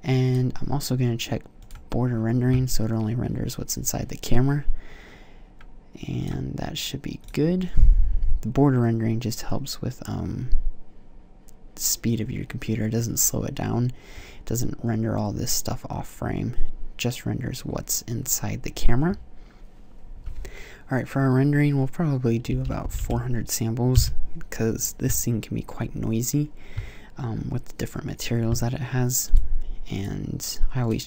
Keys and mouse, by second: 0.2-3.2 drag, 6.1-9.0 drag, 22.8 KP_0, 29.1-31.0 drag.